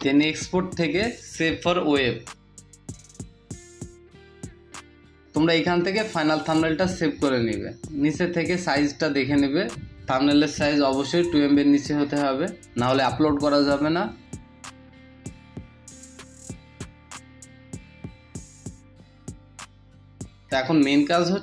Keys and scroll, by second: 11.4 Down, 11.9 Down, 12.6 Down, 16.7 Delete, 17.4 BackSpace.